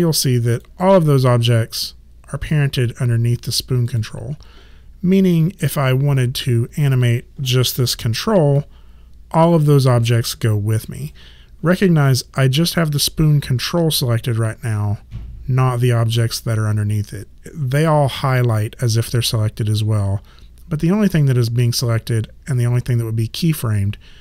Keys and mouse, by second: 0.6 click, 3.9 click, 7.8 w, 8.6 click.